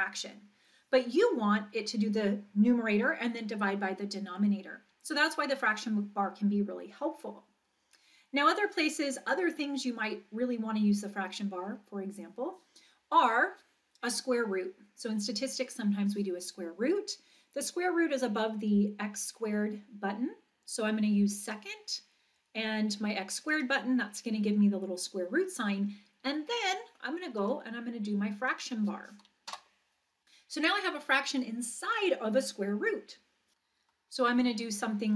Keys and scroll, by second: 29.5 Return, 33.3-34.0 typing, 35.0-35.1 typing.